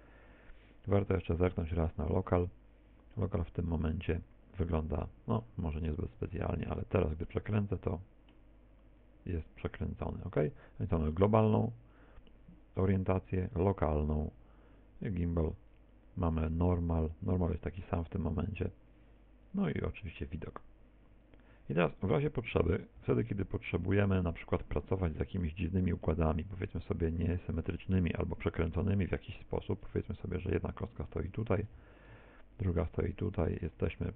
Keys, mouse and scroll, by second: 0.9 click, 2.7 scroll down 4, 3.2 middle click, 5.0 Tab, 5.5 middle click, 6.2 r, 6.8 click, 10.5 click, 18.7 click, 21.3 click, 23.7 middle click, 24.8-25.7 scroll down 9, 25.5 middle click, 26.4 shift+a, 29.6 click, 31.6 shift+d, 33.0 ctrl+click, 33.5 shift+right click, 34.0 r.